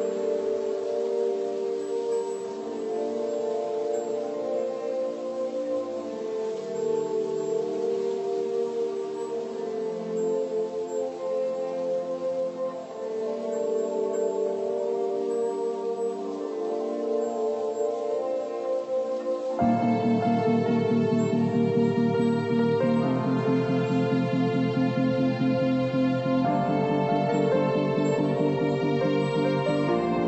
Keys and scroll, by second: 1.6 ctrl+0, 2.4 ctrl+=, 7.9 ctrl+z, 26.5 ctrl+[.